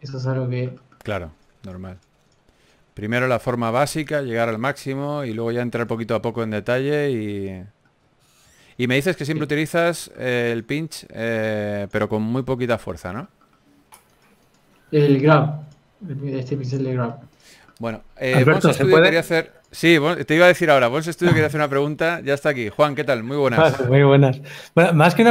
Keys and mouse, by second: 0.8 ctrl+z, 0.8 f, 2.9 f, 5.2-7.2 drag, 7.2 g, 7.2 f, 9.0 KP_3, 9.6 ctrl+z, 9.8 ctrl+z, 10.2 f, 11.1 f, 12.5 f, 20.9 f, 22.7 f.